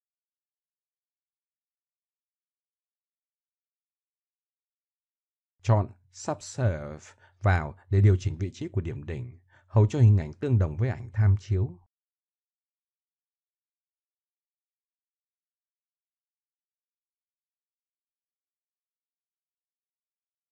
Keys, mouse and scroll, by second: 0.2 k, 0.9 k, 1.6 middle click, 2.2 k, 3.0 k, 3.2 click, 3.5 middle click, 3.7 click, 4.5 k, 7.9 middle click, 10.8 click, 12.8 click, 12.8 middle click, 13.5 middle click, 14.2-14.9 middle drag, 16.1 KP_1, 16.5 KP_7, 17.4 z, 18.1 middle click, 20.4 click.